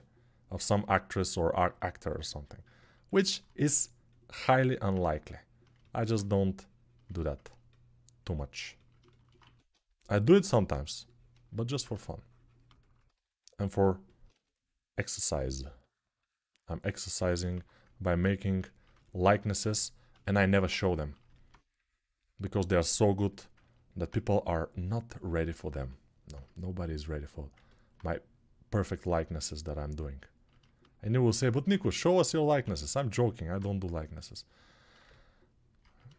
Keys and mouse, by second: 9.2 1, 17.3 1, 32.4 ctrl+z, 33.3-36.1 drag.